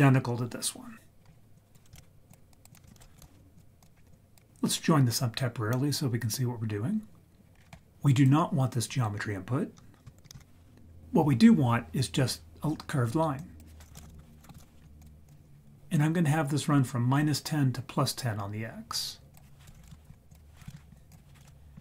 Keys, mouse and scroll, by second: 1.2-1.7 scroll down 5, 1.5 click, 1.9 shift+d, 2.5 click, 2.8 shift+a, 3.9-4.3 scroll up 2, 4.1 drag, 7.5-8.1 scroll up 4, 8.1 click, 10.4 ctrl+x, 13.3-15.2 drag, 19.3 click, 20.3 click, 21.1 click.